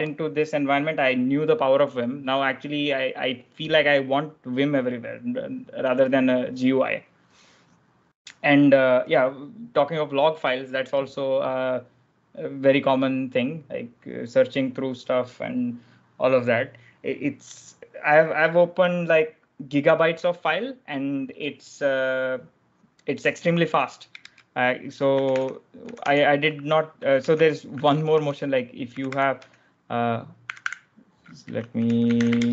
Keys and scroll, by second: 24.8 super+Tab, 25.5 ctrl+j, 25.5 ctrl+l, 26.0 ctrl+h, 27.1 ctrl+j, 28.0-32.5 typing.